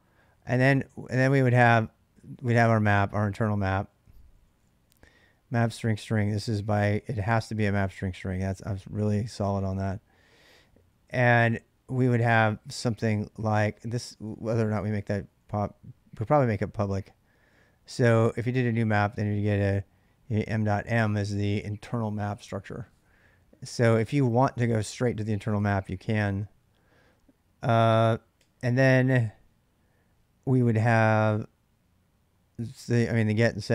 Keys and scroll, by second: 0.0-0.6 typing, 2.2-7.8 typing, 10.4 ctrl+[, 10.4-11.2 typing, 13.4 ctrl+[, 13.4 ctrl+j, 13.6-15.0 typing, 14.6 ctrl+[, 14.7 ctrl+j, 16.2-17.0 typing, 23.9 ctrl+[, 23.9 ctrl+j, 24.0-25.6 typing, 25.4 ctrl+[, 28.2 typing.